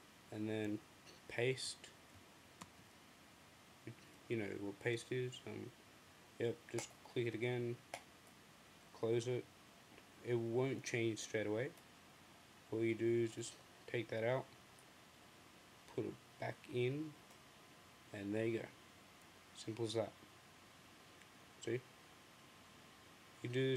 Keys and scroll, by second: 2.4 super+v.